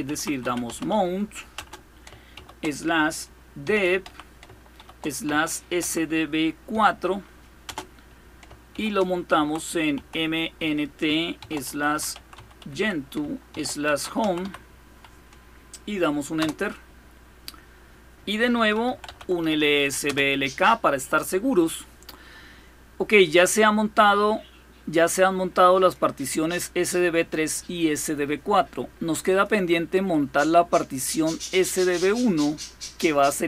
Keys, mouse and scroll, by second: 0.0-2.1 typing, 3.4-7.4 typing, 8.5-14.2 typing, 16.2 Return, 18.5-19.7 typing, 19.8 Return, 21.2-22.0 typing, 23.0-25.8 drag, 29.1 click, 29.9-31.1 drag, 31.3 click.